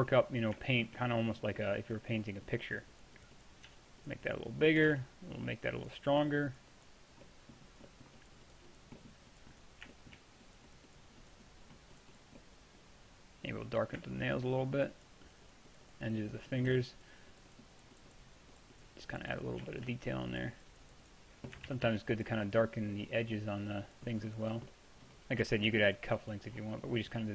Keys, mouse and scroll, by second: 0.9 click, 3.0-3.6 drag, 3.7 f, 4.9 shift+f, 5.5 click, 12.6 middle drag, 12.9 middle drag, 13.1-13.8 middle drag, 14.0-16.4 middle drag, 16.8 f, 21.8 ctrl+z, 21.9 ctrl+z, 25.2-27.3 middle drag.